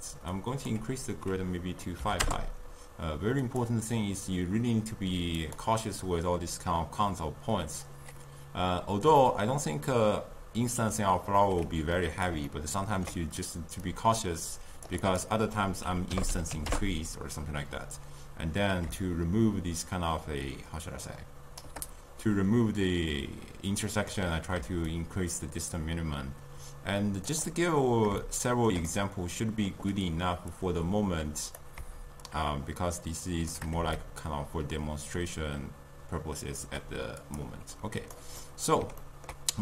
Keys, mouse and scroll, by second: 9.2-12.2 middle drag, 12.5-13.9 ctrl+middle drag, 13.9-21.0 shift+drag, 24.9-27.9 shift+drag, 28.3-30.6 shift+middle drag, 30.6-31.9 drag, 32.3-37.0 shift+drag, 37.3 click, 38.5-39.6 middle drag.